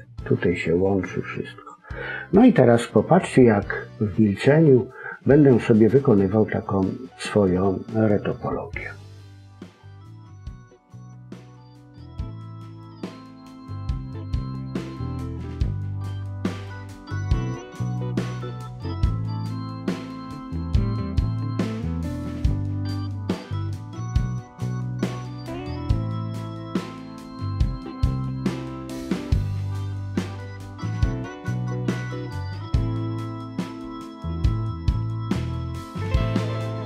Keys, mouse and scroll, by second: 0.8 click, 1.9 middle click, 8.5 scroll up 2, 8.8 middle click, 10.7 click, 12.1 ctrl+z, 12.4 middle click, 12.9 click, 13.5 click, 14.7 click, 15.0 middle click, 16.0 click, 16.4 click, 17.2 click, 17.6 click, 17.8 middle click, 18.3 click, 18.8 middle click, 19.4 click, 19.9 click, 20.6 middle click, 21.3 click, 22.2 middle click, 22.6 click, 23.3 middle click, 24.5 scroll up 1, 24.6 middle click, 24.9 scroll down 3, 25.0 middle click, 25.3 click, 25.8 middle click, 26.3 click, 26.8 click, 28.1 click, 28.6 click, 29.1 middle click, 29.7 click, 30.1 click, 30.6 middle click, 31.0 click, 31.6 middle click, 32.1 click, 32.5 click, 32.9 middle click, 33.4 click, 33.8 click, 34.2 middle click, 35.7 g, 36.0 middle click, 36.5 click.